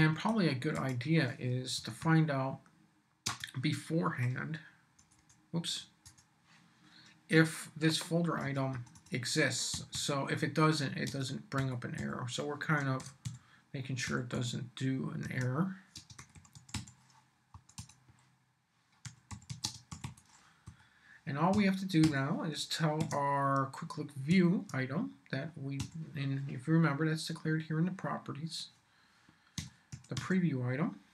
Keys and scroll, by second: 0.7 Return, 1.5-3.2 typing, 5.0 BackSpace, 8.7 Return, 9.5-14.3 typing, 15.2 Tab, 15.9-17.0 typing, 17.5 Return, 18.8-23.0 typing, 20.6 Up, 24.3 Tab, 25.8 •, 29.3-30.7 typing.